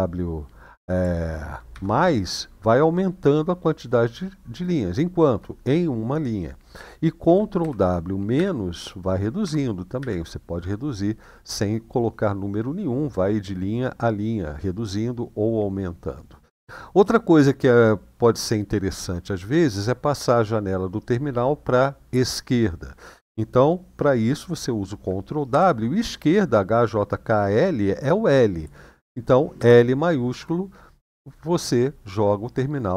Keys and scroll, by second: 7.4 ctrl+w, 8.1 -, 9.2 ctrl+w, 9.7 -, 25.3 ctrl+w, 29.4 l.